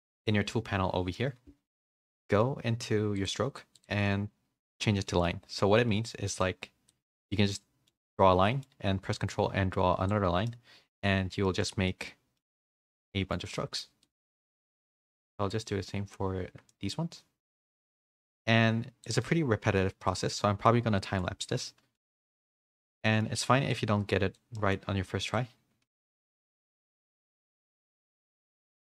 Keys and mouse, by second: 3.2 click, 3.7-4.8 drag, 5.0 middle click, 5.7 middle click, 6.4 click, 7.3 middle click, 8.5 middle click, 9.3 ctrl+click, 10.4 middle click, 11.7 shift+middle click, 12.1 middle click, 12.7 middle click, 13.5 middle click, 14.0 middle click, 14.5-15.5 drag, 15.6 middle click, 16.7 middle click, 17.4 middle click, 18.2 ctrl+click, 19.2 middle click, 20.0-21.1 middle drag, 21.6 shift+middle click, 22.0 click, 22.6 middle click, 23.0 middle click, 23.7 click, 24.5 middle click, 25.3 ctrl+click, 26.2 middle click, 27.5 middle click, 28.0 middle click.